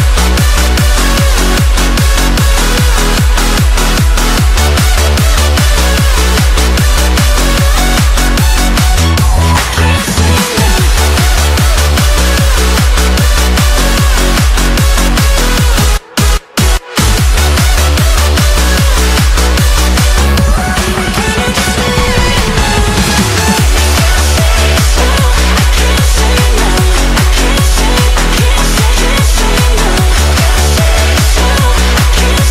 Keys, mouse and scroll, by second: 0.3-1.8 shift+middle drag, 1.8 shift+a, 2.9-3.2 shift+middle drag, 3.2-3.9 scroll down 1, 3.9 s, 7.3 shift+middle click, 8.2-11.5 drag, 11.5-12.1 right drag, 12.1 scroll up 1, 12.4-13.0 shift+middle drag, 13.0 scroll down 2, 13.3 s, 15.0-18.0 middle drag, 18.0 r, 22.4-23.8 middle drag, 23.8-24.9 scroll up 1, 24.9 g, 25.6-26.5 middle drag, 26.5 shift+d, 28.1 r, 31.3-32.5 middle drag.